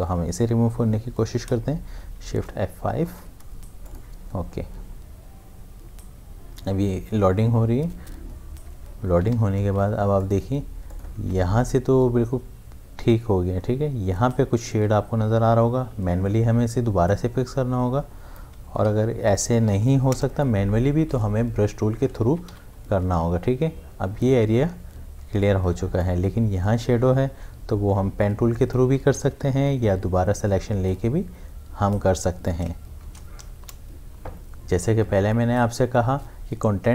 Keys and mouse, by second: 1.5 shift+Num_Lock, 2.3 shift+F5, 3.9 click, 9.0 click, 9.2 ctrl+d, 9.3 v, 9.8 ctrl+space, 10.2 ctrl+click, 10.3 ctrl+space, 10.9 ctrl+click, 15.9 m, 17.1-19.3 drag, 19.3 shift+F5, 20.1 Return, 22.3 ctrl+d, 22.5 v, 25.1 space, 25.4 click, 25.7 space, 28.2 click, 28.4 space, 29.8 m, 30.9-33.0 drag, 33.0 shift+F5, 33.6 Return.